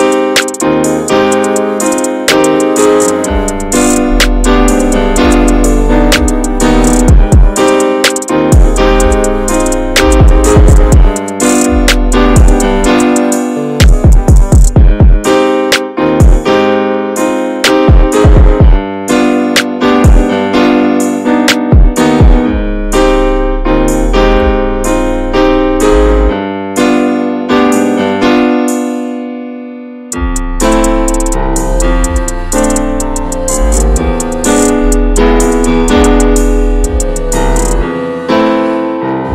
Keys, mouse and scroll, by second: 0.0 shift+middle click, 0.1-0.5 scroll up 1, 0.5 a, 0.9 a, 1.7 right click, 2.6 Tab, 2.8-3.1 drag, 3.1 ctrl+s, 3.7 /, 4.5 middle click, 4.7-5.1 drag, 5.1 a, 5.6 ctrl+a, 5.8 click, 6.1 ctrl+s, 6.6 click, 7.5 /, 7.9-8.4 middle drag, 8.4 Tab, 8.7-10.4 middle drag, 11.4 scroll down 2, 11.7 click, 12.5 alt+z, 13.1-14.9 middle drag, 14.9 3, 15.4 shift+middle click, 15.6-16.0 scroll up 1, 16.7 alt+z, 17.0 alt+z, 17.7 click, 18.2 shift+middle click, 19.0 x, 19.4 scroll down 1, 19.7 shift+middle click, 20.1-20.5 scroll up 1, 20.8 1, 21.2 alt+z, 21.9 click, 22.3 s, 24.6 middle click, 25.5 scroll up 1, 25.7-27.1 middle drag, 27.1 alt+z, 27.4 middle click, 28.2 Tab, 28.8-29.7 scroll down 3, 29.7 click, 29.9 `, 30.4 middle click, 30.7 ctrl+s, 31.1 /, 31.8 middle drag, 32.0 drag, 32.3 shift+middle drag, 32.5 scroll up 1, 32.7-34.7 middle drag, 34.7 ctrl+s, 35.6 Tab, 36.4 Tab, 36.7 `, 37.3 middle drag, 37.6 ctrl+s, 37.9 click, 38.3 /, 38.8 middle click, 39.1 Tab.